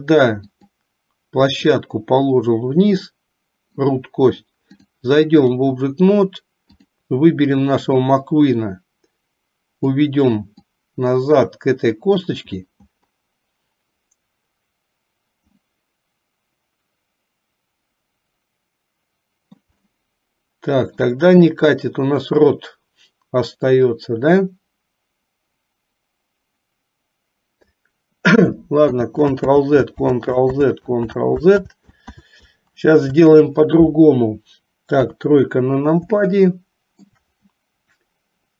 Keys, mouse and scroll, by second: 0.6 click, 1.9-3.8 drag, 5.0 click, 6.9 click, 8.0-10.1 drag, 10.6-12.3 drag, 15.8-19.9 middle drag, 20.1-21.2 shift+middle drag, 29.0 ctrl+z, 29.6 ctrl+z, 30.1 ctrl+z, 30.7 ctrl+z, 31.2 ctrl+z, 31.7 ctrl+z, 32.3 ctrl+z, 35.1 KP_3, 36.4 middle click.